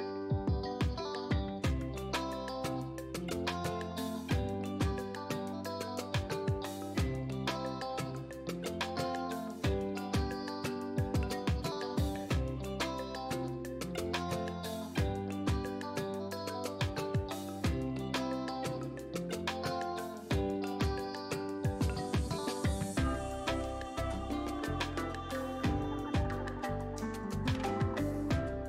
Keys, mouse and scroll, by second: 2.1-9.4 drag, 10.4 click, 13.5 click, 19.2 click, 22.3 click, 26.0 space, 26.1 click, 26.2 click, 26.6 space.